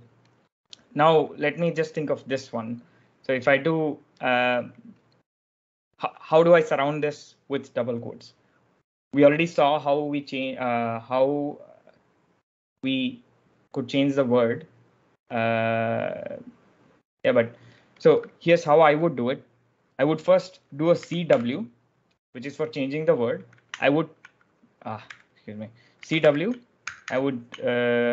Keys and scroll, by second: 20.6-21.7 typing, 23.5 Escape, 24.9-26.9 typing.